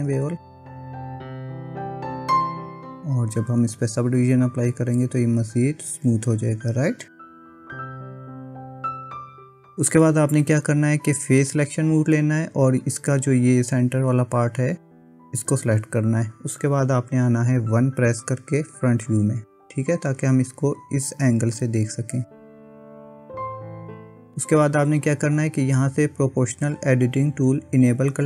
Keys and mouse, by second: 0.1 Tab, 0.8-2.1 middle drag, 2.5 middle click, 4.7 click, 8.0 click, 8.9 middle click, 10.1 Tab, 11.6 click, 18.6 KP_1.